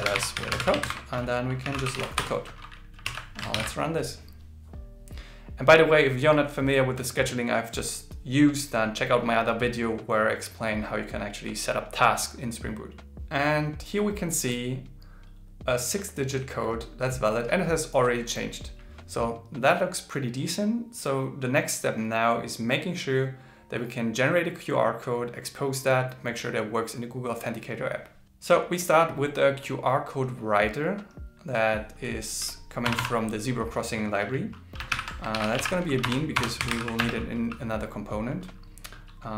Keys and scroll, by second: 0.8 shift+8, 3.0 super+s, 3.5 ctrl+shift+r, 34.9 alt+l, 35.4 shift+b.